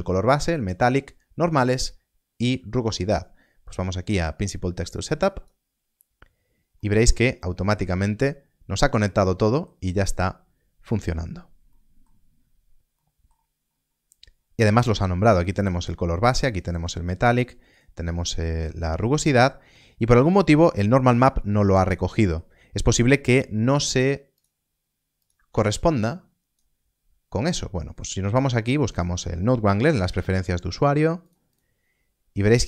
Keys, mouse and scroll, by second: 4.1 click, 6.7 middle click, 9.7 scroll down 1, 11.6 middle click, 12.3 scroll up 1, 12.9 middle click, 13.6 scroll up 1, 15.3 click, 15.8 middle click, 16.5 click, 17.0 middle click, 17.6 click, 18.1 middle click, 18.6 scroll down 1, 19.7 middle click, 21.4 scroll up 1, 22.1 middle click, 24.3 middle click, 29.8 n, 30.1 e, 31.2 click.